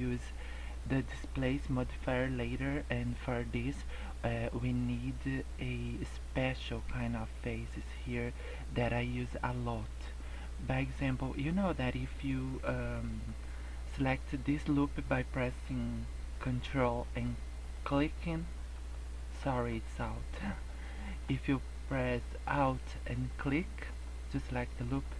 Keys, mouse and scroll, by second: 12.6 middle click, 17.0 ctrl+click, 17.7 ctrl+click, 18.7 alt+click, 20.0 middle click, 20.4 scroll up 1, 20.8 middle click, 21.8 middle click, 24.0 middle click, 24.9 scroll down 3.